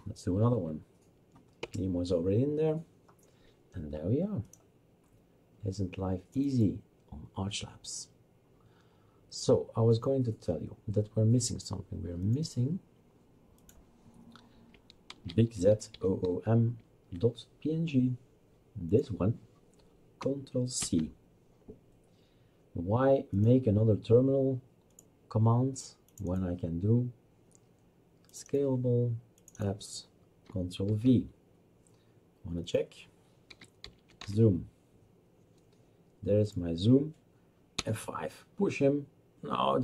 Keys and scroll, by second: 1.6 Return, 15.1-16.8 typing, 20.8 ctrl+c, 30.9 ctrl+v, 33.3-34.7 typing, 37.8 F5.